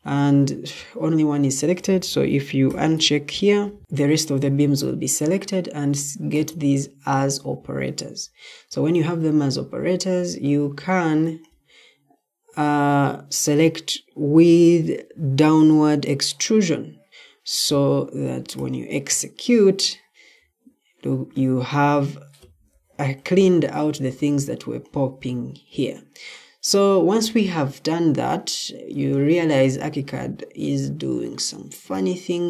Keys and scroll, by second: 20.3 Escape.